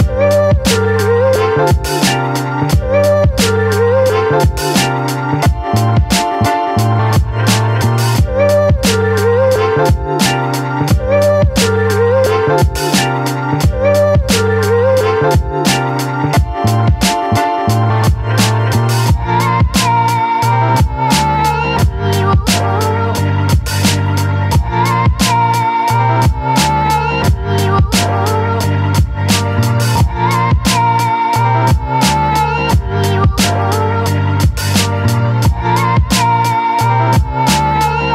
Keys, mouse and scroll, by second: 2.9 click, 9.9 click, 9.9-10.8 typing, 11.8-13.8 typing, 17.1 click, 24.4 ctrl+t, 25.4 alt+click, 27.8 space, 28.2-32.5 alt+drag, 32.5 ctrl+t, 33.6-37.0 alt+drag, 37.2 space, 37.6-38.1 alt+drag.